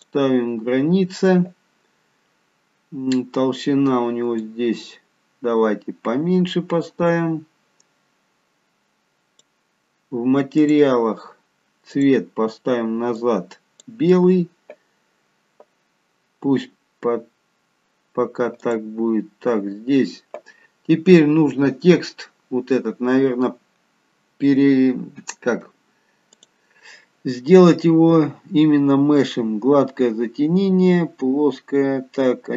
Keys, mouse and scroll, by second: 0.1 click, 2.0-3.0 scroll down 2, 4.5 click, 10.6 click, 12.0 click, 18.7 click, 26.4 click.